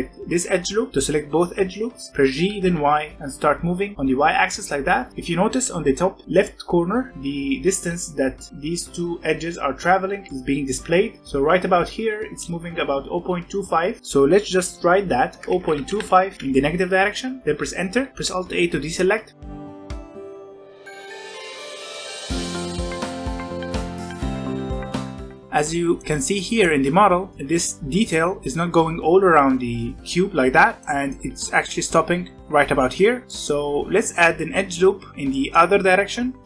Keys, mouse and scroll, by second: 2.3 g, 18.1 alt+a, 19.5 alt+click, 20.4 alt+shift+click, 20.6 g, 21.6 middle click, 21.8 alt+a, 21.9 alt+click, 23.2 shift+middle click, 23.6 g, 25.0 scroll down 1, 25.1 middle click, 25.5-27.3 scroll up 2, 25.9 middle click, 27.3 middle click, 27.4-30.1 scroll down 1, 30.8 middle click, 31.1 scroll up 1, 33.2-36.4 shift+middle drag.